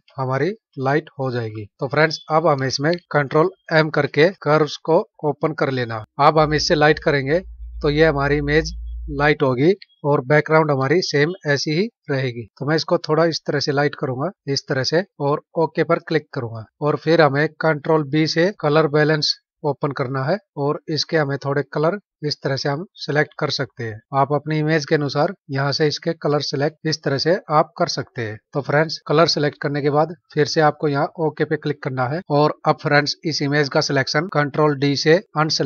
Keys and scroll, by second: 0.0 ctrl+=, 3.9 ctrl+m, 35.3 ctrl+d.